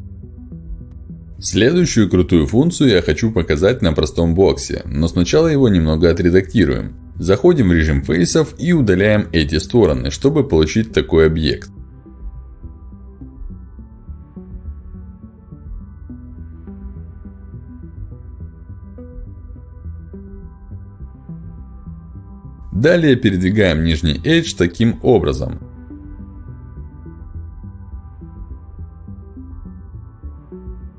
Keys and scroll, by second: 5.3 ctrl+z, 15.3 Delete, 24.0 g, 24.2 x.